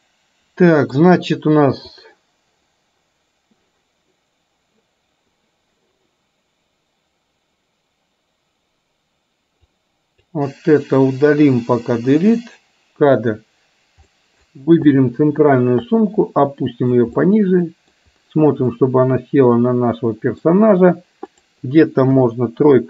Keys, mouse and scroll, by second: 2.0 click, 9.9-10.2 drag, 12.0 Delete, 14.1 middle click, 15.0 click, 16.0 click, 16.2 click, 17.2 middle click, 18.9-20.5 middle drag, 21.5 click.